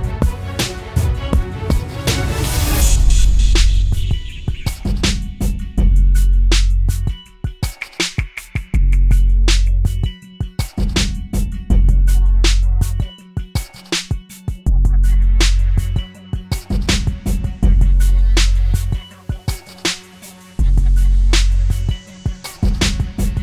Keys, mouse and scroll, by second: 10.6 alt+click, 11.9-12.7 typing, 14.2-15.2 typing.